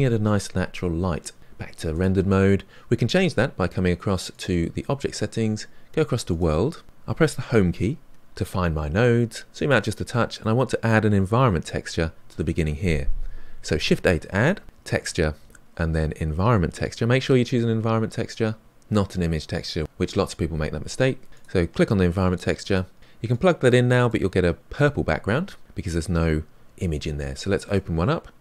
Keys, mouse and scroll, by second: 1.9 click, 24.2-27.9 drag.